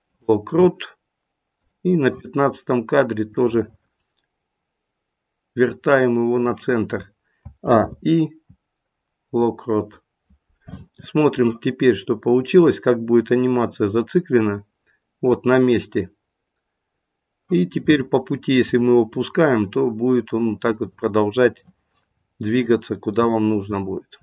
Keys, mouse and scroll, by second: 1.6 click, 7.4 a, 7.7 i, 12.4 click, 22.1-23.0 scroll down 3, 23.0 scroll down 1, 23.2 middle click.